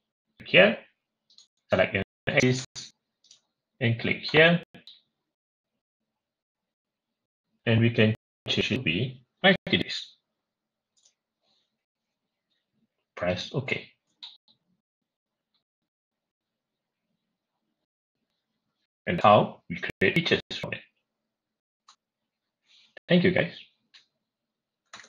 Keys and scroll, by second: 21.5 F6, 24.7 shift+Escape.